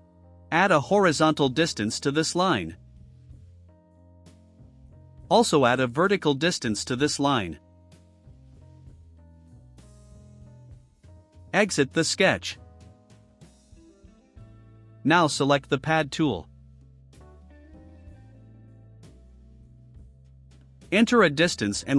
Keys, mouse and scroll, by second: 1.9 click, 2.5-4.0 typing, 4.9 click, 7.4 click, 9.1 1, 9.7 0, 9.8 0, 10.2 Return, 13.4 click, 14.3-14.7 scroll down 2, 19.2 click, 21.7 2.